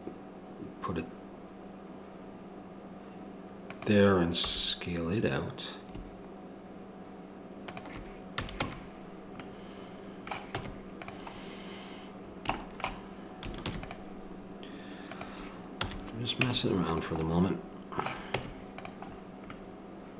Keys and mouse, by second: 4.4 s, 8.4 a, 8.6 Tab, 10.5 Tab, 13.6 ctrl+r, 15.8 a, 16.4 Tab, 18.3 Tab.